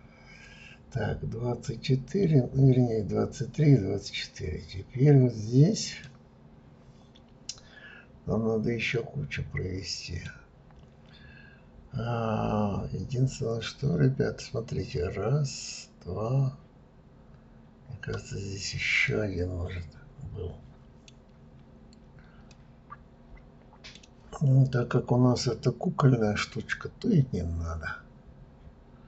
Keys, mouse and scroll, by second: 4.5-6.0 scroll up 2, 6.0-9.1 middle drag, 19.1-21.2 middle drag, 21.2 scroll down 2, 22.5-25.5 middle drag.